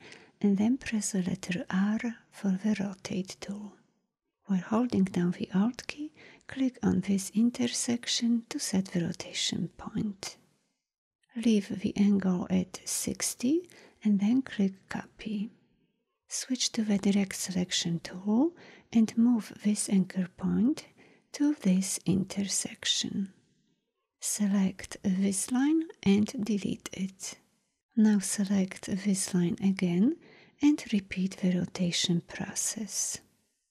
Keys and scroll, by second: 1.6 r, 17.1 a, 24.1 v, 26.2 Delete, 30.5 r.